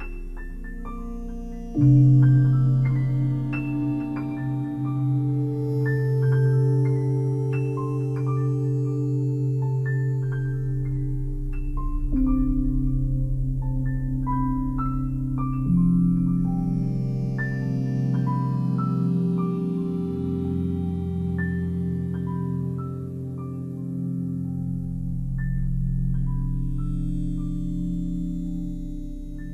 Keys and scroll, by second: 22.8 ctrl+i, 24.6 space.